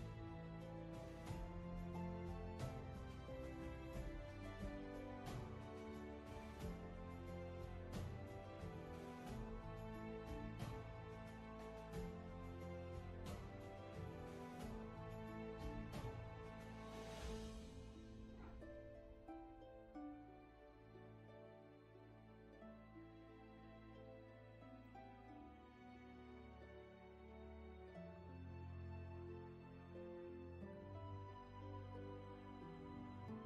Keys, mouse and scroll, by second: 8.7 space, 13.6-14.0 scroll down 1, 14.0 space, 31.5 ctrl+z.